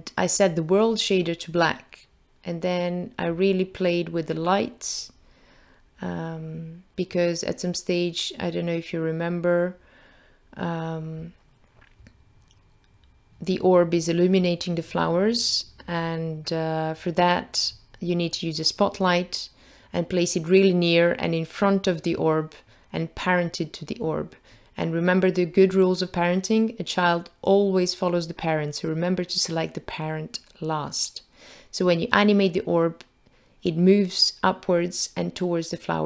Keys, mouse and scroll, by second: 1.3-2.8 scroll down 5, 2.8 middle click, 3.6-4.8 scroll up 3, 4.8 middle click, 4.8 scroll up 2, 5.7-6.5 scroll up 2, 6.5 middle click, 7.3-8.0 scroll up 2, 8.1 click, 12.7 click, 16.0 click, 18.1 click, 21.0 click, 23.8 click, 24.7 click, 26.0 click, 28.7 click, 30.3 0.